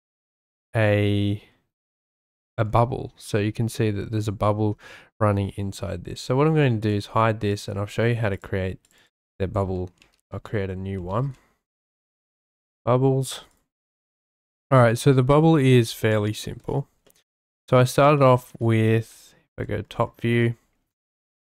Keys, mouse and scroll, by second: 0.6-1.5 drag, 3.7 shift+middle drag, 7.5 click, 7.7 c, 8.3 click, 8.8 click, 9.0-12.1 drag, 13.5 click, 14.9-15.4 drag, 15.4-16.0 shift+middle drag, 16.0-16.3 shift+drag, 16.3-16.7 shift+middle drag, 17.1 shift+drag, 17.2 shift+middle click, 17.6 middle drag, 18.2 shift+middle drag, 20.5 shift+middle click, 21.4 shift+a.